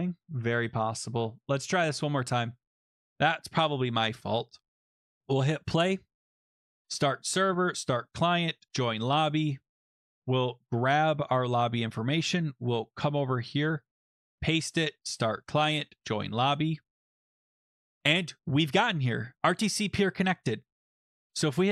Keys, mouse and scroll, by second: 1.8 click, 3.2 click, 4.2 Escape, 5.2 click, 6.5 click, 6.8 click, 7.6 click, 8.7 click, 9.2 click, 9.9 click, 10.0 click, 10.6 ctrl+c, 12.2 click, 13.0 click, 13.8 click, 14.1 click, 14.2 click, 14.3 ctrl+v, 15.0 click, 16.0 click, 20.9 click, 21.2-21.7 typing.